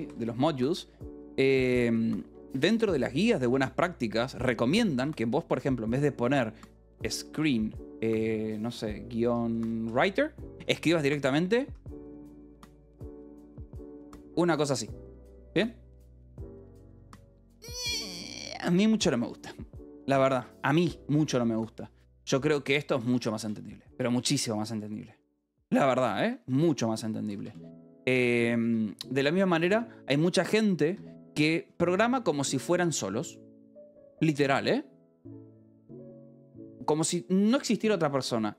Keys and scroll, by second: 0.0-2.7 typing, 0.6 Escape, 3.9 a, 3.9 space, 4.8 BackSpace, 6.4-15.7 typing, 14.2 Escape, 16.6 Escape, 22.7 v, 23.0 b, 23.8 Escape, 25.4-28.5 typing, 26.6 Escape, 28.6 Escape, 30.5 c, 30.9 Escape, 31.2 a.